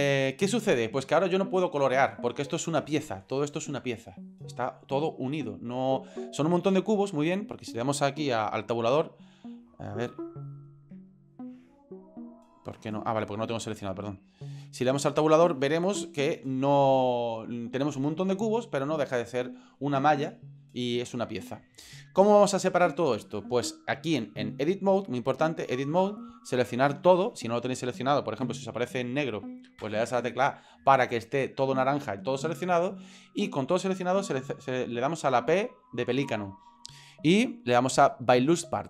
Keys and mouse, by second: 8.9 Tab, 10.7 click, 10.9 Tab, 12.1-12.7 drag, 14.3 right click, 14.8 Tab, 28.4 a, 28.7 a, 29.8 a, 35.5 p.